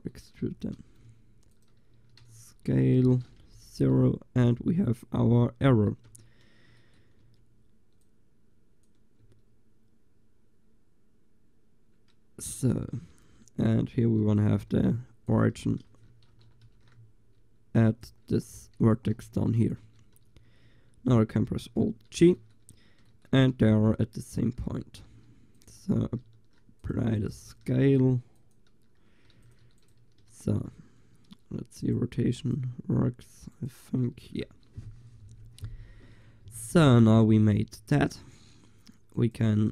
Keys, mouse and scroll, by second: 0.1-3.7 drag, 0.5 e, 2.0 s, 3.8-6.3 drag, 6.1 Tab, 6.5 middle click, 7.3 Tab, 9.3 Tab, 10.2-11.5 middle drag, 14.1 Tab, 14.8 shift+s, 15.6 Tab, 16.7 ctrl+alt+shift+c, 18.5 Tab, 19.2 g, 19.9 Tab, 21.7 alt+g, 23.6 s, 25.2 s, 26.3 ctrl+a, 27.5 ctrl+a, 29.4 ctrl+s, 31.5-36.9 drag, 34.2 ctrl+s, 38.0 middle click, 38.0 click, 39.2-39.7 drag.